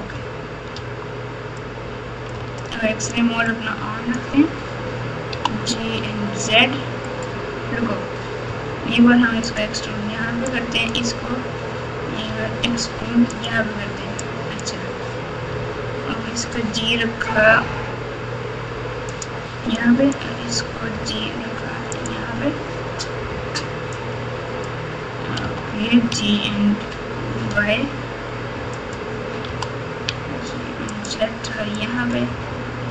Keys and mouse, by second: 0.7 Tab, 1.6 click, 2.3 alt+z, 2.6 alt+click, 3.5 click, 5.3 g, 9.2 e, 10.7 click, 12.2 e, 14.2-14.6 drag, 15.5 g, 20.0 click, 20.9 g, 23.9 click, 25.4 g, 29.4 g, 30.9-31.8 z, 31.8-32.1 drag, 32.8 g.